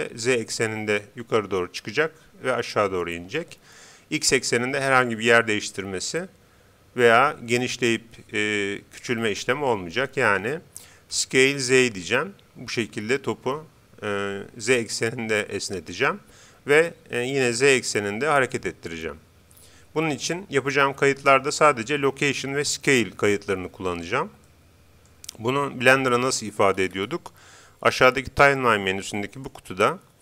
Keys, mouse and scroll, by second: 11.1 s, 17.3 g, 24.5-26.2 middle drag, 26.7-28.7 scroll up 1, 28.7 scroll up 1, 29.3-30.2 drag.